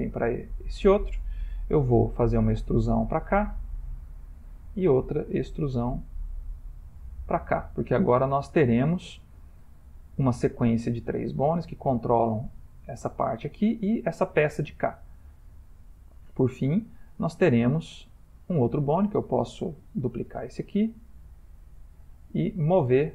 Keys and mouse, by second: 2.4 e, 4.7 e, 18.9 click, 20.5 shift+d, 22.6 click.